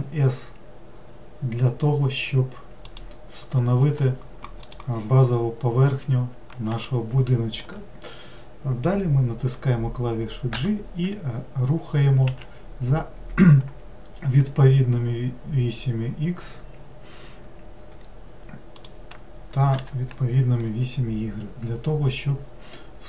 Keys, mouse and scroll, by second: 6.9-10.0 shift+middle drag, 10.6 g, 19.7 g.